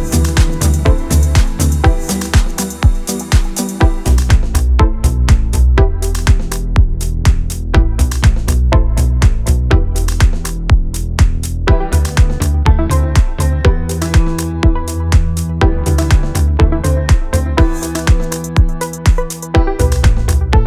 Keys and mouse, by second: 0.0 middle click, 0.2 middle click, 1.2-3.4 typing, 1.2 click, 1.5 click, 1.6 middle click, 1.8 shift+middle click, 2.0 middle click, 2.8 click, 3.3 right click, 3.6 middle click, 4.0 middle click, 4.3 ctrl+b, 4.5 f, 4.6 ctrl+z, 4.7 d, 4.8 click, 4.8 d, 4.9 right click, 4.9 d, 5.0 ctrl+z, 5.1 ctrl+z, 5.1 middle click, 5.3 middle click, 5.5 middle click, 5.8 shift+middle click, 6.4 KP_3, 6.7 ctrl+r, 7.1 middle click, 7.4 Tab, 7.6 middle click, 7.7 middle click, 7.9 middle click, 8.0 f, 8.2 click, 8.3-9.0 d, 8.6 middle click, 8.8 click, 8.9 middle click, 9.0 right click, 9.1 middle click, 9.4 click, 9.5 middle click, 9.8 middle click, 10.0 right click, 10.1 middle click, 10.3 middle click, 10.4 middle click, 10.8 click, 11.0 middle click, 11.1 right click, 11.3 shift+middle click, 11.8 middle click, 12.0 KP_3, 12.1 shift+middle click, 13.2 shift+middle click, 13.7 shift+middle click, 13.8 click, 13.8-15.7 typing, 14.3 right click, 15.0 click, 15.8 shift+middle click, 16.3 click, 17.0 shift+middle click, 17.3 click, 17.3-20.2 typing, 17.4 shift+middle click, 17.7 click, 17.9 middle click, 18.2 click, 18.4 click, 18.5 right click, 18.7 right click, 19.4 click, 19.6 click, 19.9 click, 20.2 right click, 20.6 shift+middle click.